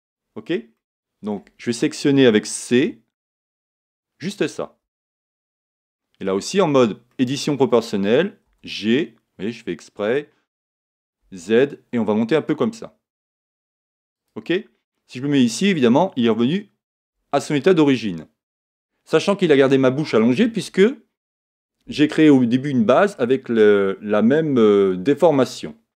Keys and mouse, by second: 2.7 c, 5.3-9.1 middle drag, 8.8 g, 14.2 click, 15.2 Tab, 16.1-20.1 middle drag.